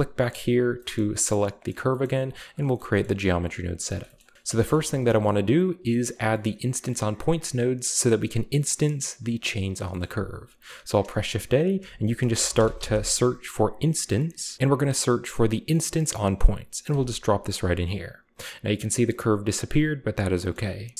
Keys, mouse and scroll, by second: 0.1-0.8 right drag, 0.8-1.3 shift+middle drag, 0.8-3.8 shift+scroll up 2, 1.7 middle click, 2.1 middle click, 2.3 click, 2.7-3.8 middle drag, 4.0 shift+middle click, 4.2 shift+middle click, 4.4 ctrl+b, 4.8-5.7 shift+scroll up 1, 5.0 a, 6.4-7.2 middle drag, 7.2-7.8 right drag, 10.0-10.8 shift+middle drag, 10.2 shift+a, 12.4 typing, 14.4 BackSpace, 15.9 click, 16.9 click, 17.3 click, 18.0 scroll down 1, 19.0 middle click, 19.5-20.4 middle drag, 20.5-20.9 middle drag.